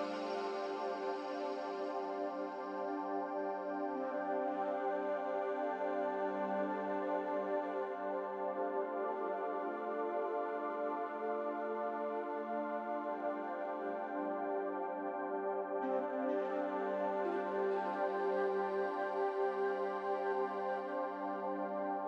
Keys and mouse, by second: 0.9-1.5 drag, 1.6 Tab, 3.5 h, 4.0 click, 4.2 Tab, 4.7 2, 5.2 click, 6.3 shift+click, 6.7-7.4 middle drag, 7.8 shift+click, 8.1-8.6 middle drag, 9.1 shift+click, 9.7-10.1 middle drag, 14.4 middle click, 15.3 click, 16.8-19.3 drag, 18.7 ctrl+r, 19.3-21.7 middle drag.